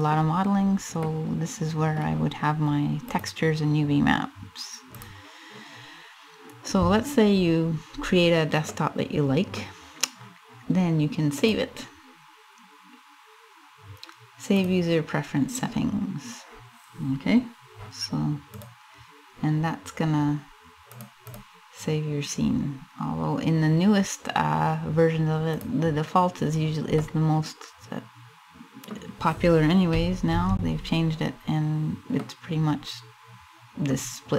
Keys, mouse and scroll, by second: 1.9 middle click, 1.9 scroll up 5, 6.9-7.5 scroll down 1, 7.5 scroll down 1, 8.2 middle click, 11.3 click, 19.0 click, 21.4 click, 26.0-26.7 scroll down 3, 26.7 middle click, 29.9 shift+c, 31.1-31.4 scroll up 1, 31.8 middle click, 32.6 middle click.